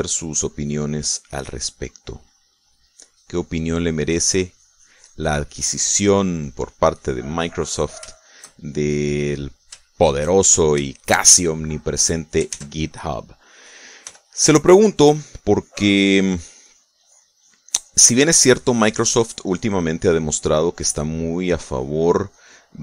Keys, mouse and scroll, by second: 0.1 click, 1.2-2.2 middle drag, 2.3 click, 2.8 middle click, 3.3 middle click, 4.0-8.9 drag, 9.0 shift+middle click, 10.2 shift+click, 10.5 shift+middle click, 11.8 shift+middle click, 13.4 ctrl+s, 13.6 ctrl+middle click, 14.9 f, 16.0 click, 16.4-19.3 drag, 21.3 click, 22.5-22.8 drag.